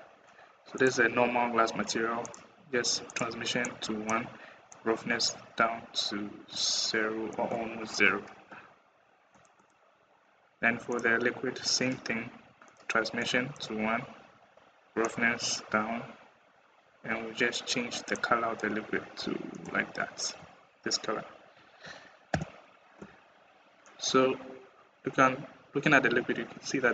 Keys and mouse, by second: 0.6 click, 2.0 click, 2.9 click, 3.5 click, 7.2 middle click, 9.2 click, 9.4 click, 10.8 middle drag, 12.5 middle click, 13.1 click, 14.9 click, 22.1 /, 24.5 middle click, 24.7 middle click, 24.9 middle click, 25.6 middle click, 25.8 middle click, 26.0 middle click.